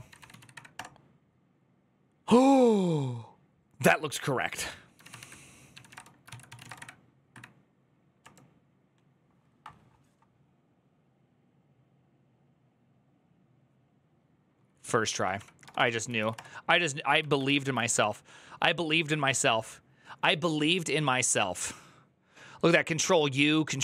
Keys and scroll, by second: 0.5 Up, 0.5 Return, 0.5 typing, 4.5-6.9 typing, 7.1 Up, 8.0 Return, 15.6 Up, 15.6-17.7 typing, 17.8 ctrl+d.